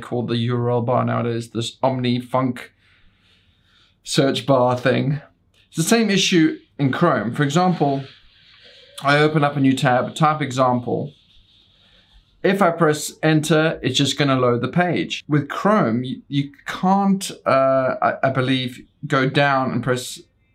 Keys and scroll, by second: 10.3 ctrl+t, 11.2-12.3 typing.